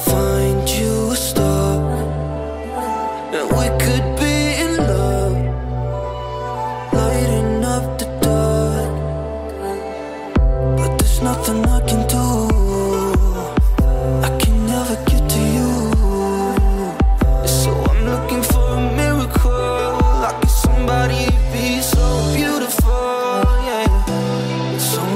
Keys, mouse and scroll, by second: 10.4-11.0 drag, 19.8-21.8 drag.